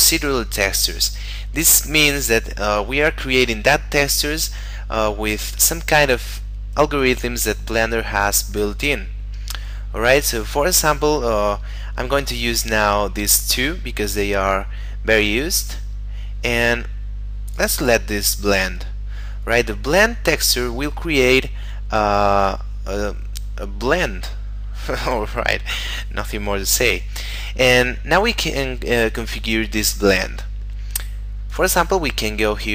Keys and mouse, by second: 17.4 click, 31.4 click.